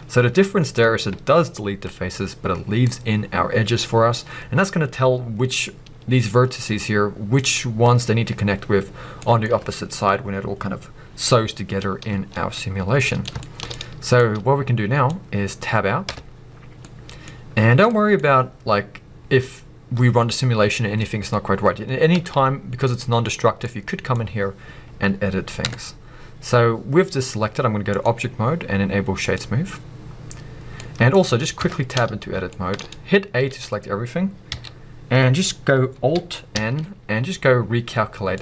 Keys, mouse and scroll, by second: 4.0-5.5 scroll down 1, 5.5-9.2 scroll up 1, 12.5 scroll down 1, 13.8-14.2 scroll down 1, 16.0 Tab, 16.4-16.8 scroll down 1, 16.8 middle click, 17.3-17.9 scroll up 1, 17.9-27.9 middle drag, 18.2-22.1 scroll up 2, 22.1 b, 23.6 scroll up 2, 25.6 Tab, 27.9-30.8 drag, 30.0-30.8 scroll down 2, 30.8-38.4 middle drag, 31.2-31.6 scroll up 2, 31.6 b, 36.5 n.